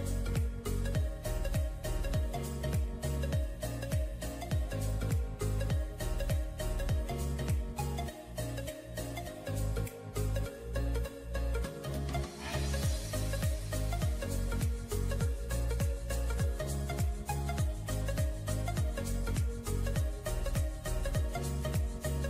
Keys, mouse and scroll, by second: 0.7 double click, 13.2 right click, 17.6 ], 17.9 ], 18.1 ], 18.9 [.